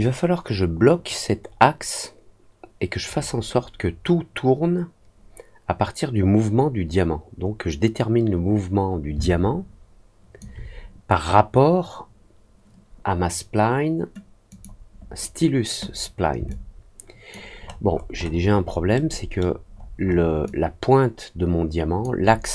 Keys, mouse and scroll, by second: 9.1-10.3 alt+drag, 14.4 click, 16.4 alt+click, 17.5-18.1 alt+scroll up 2, 18.4 alt+scroll up 1, 18.9 alt+middle click, 19.6 alt+scroll up 1, 19.9 alt+middle click, 20.4-21.9 alt+drag.